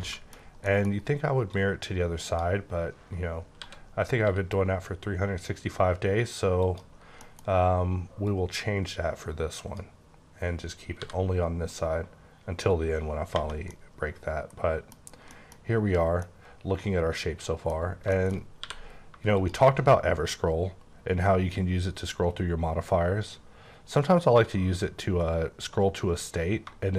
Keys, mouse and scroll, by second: 0.5 scroll up 1, 0.6 middle click, 1.5 click, 3.5-4.2 typing, 6.6 typing, 7.0 scroll down 2, 7.2 middle click, 8.2 click, 11.0 b, 13.3 space, 13.7 middle click, 15.3 middle click, 16.5 middle click, 17.8 scroll down 1, 18.1 middle click, 18.6 q, 19.3 shift+click, 20.0-21.0 scroll up 12, 21.4-21.9 scroll down 4, 22.0 scroll up 5, 22.3-23.1 scroll down 8, 23.1-23.8 scroll up 7, 24.2-24.8 scroll down 4, 24.9-25.4 scroll up 2, 25.4-26.2 scroll down 4.